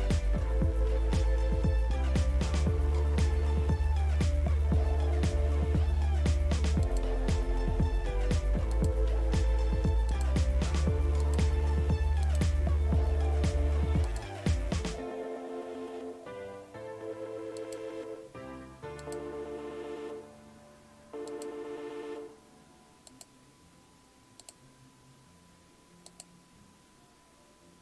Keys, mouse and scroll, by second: 6.9 click, 11.2 click, 12.3 click, 17.6 click, 19.0 click, 21.3 click, 23.1 click, 24.4 click.